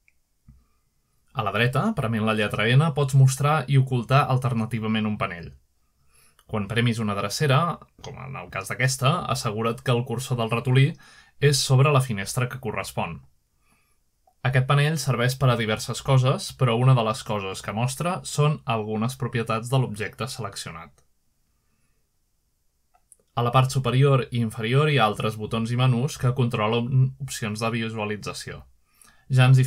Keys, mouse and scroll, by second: 1.6-2.6 drag, 4.6 n, 6.2 n, 6.9 n, 8.8 n, 10.2 n, 13.7 n, 15.1 n, 15.9 n, 18.2 click, 21.1-22.1 drag, 24.5 click, 25.0 click, 27.0 click.